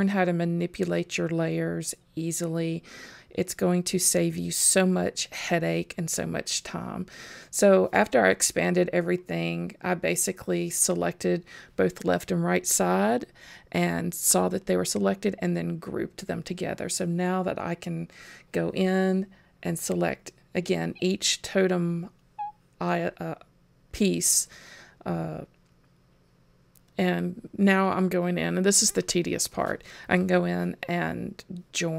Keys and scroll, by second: 8.2 super+s.